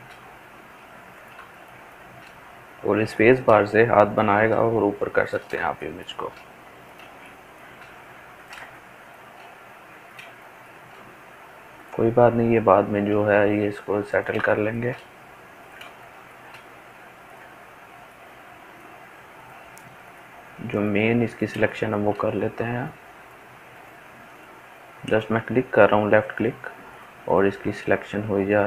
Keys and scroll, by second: 13.1-16.5 ctrl+z.